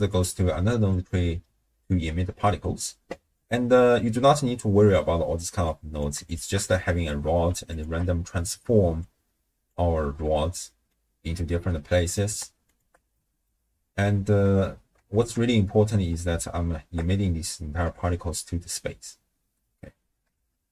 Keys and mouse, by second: 0.1 click, 3.3 middle click, 5.7 click, 6.3 alt+shift+click, 7.7 alt+shift+click, 9.0 click, 10.8 middle click, 11.9 middle click, 12.7 alt+shift+click, 13.1 middle click, 15.1 shift+space, 16.0 space, 16.4-16.9 shift+drag, 17.9 shift+space, 20.4 shift+space.